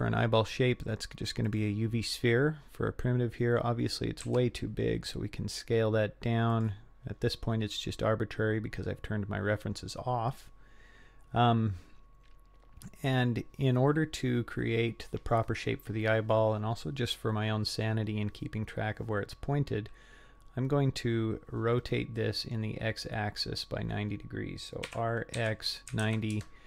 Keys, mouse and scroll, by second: 2.6-4.3 scroll down 6, 4.3 s, 7.1 scroll up 4, 7.8-8.2 scroll up 4, 8.7-9.0 scroll up 2, 9.0-9.8 scroll down 2, 9.8 scroll up 1, 10.1-10.5 scroll down 1, 21.8-22.6 middle drag, 23.1-24.2 scroll down 7, 24.2-24.9 scroll up 2, 24.9 r.